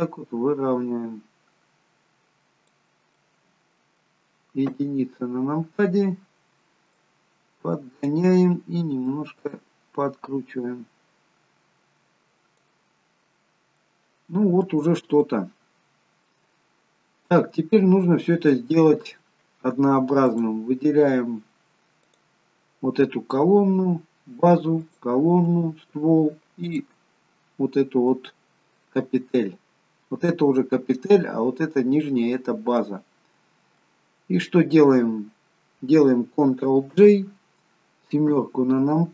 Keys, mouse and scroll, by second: 3.1 middle click, 4.7 KP_1, 6.9 click, 9.0 click, 13.0-13.8 scroll down 2, 13.8 middle click, 13.8-15.0 scroll down 2, 15.1 shift+middle click, 16.5-17.1 scroll up 4, 17.3-18.0 scroll down 3, 18.0-19.9 scroll up 2, 18.4 middle click, 20.2 click, 22.0 click, 24.8 shift+click, 25.7-26.6 scroll down 3, 26.6 shift+click, 28.1 middle click, 29.8-31.1 scroll up 2, 32.2-34.1 scroll down 2, 36.9 ctrl+j, 38.2 KP_7.